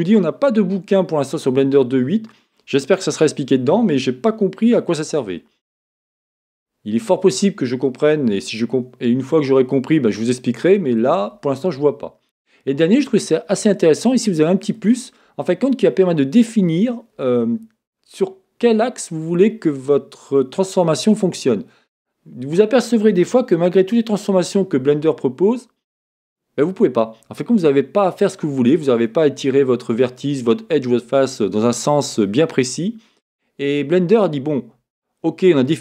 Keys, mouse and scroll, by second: 4.3-13.0 middle drag, 13.0-35.8 drag, 23.7 Escape.